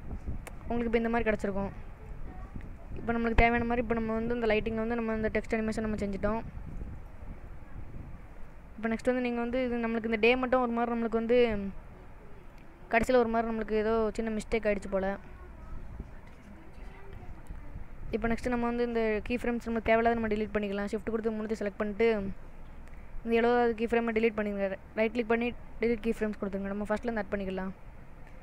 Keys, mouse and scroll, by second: 0.4 space, 2.0 click, 2.8 space, 6.9 space, 7.6 middle click, 10.3 scroll down 1, 10.7 middle click, 12.6 click, 13.6 click, 14.8 middle click, 17.2 click, 19.2 click, 20.2 shift+click, 21.1 shift+click, 23.0 click, 25.0 right click, 27.4 click.